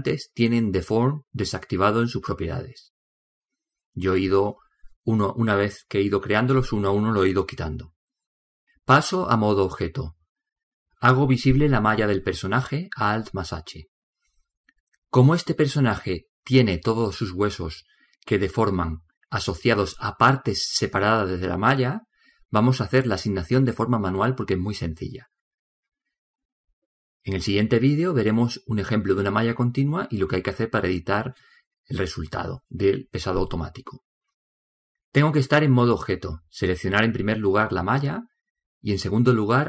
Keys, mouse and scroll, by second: 9.8-11.6 drag, 11.7 click, 12.7 alt+h, 14.9-16.9 middle drag, 18.8 middle click, 19.6-22.4 right drag, 38.0 right click.